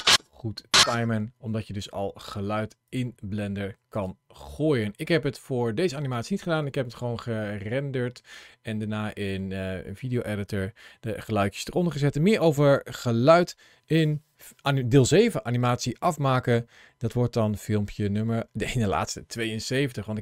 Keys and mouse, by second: 0.6 click, 2.7-3.9 drag, 6.7-9.2 middle drag.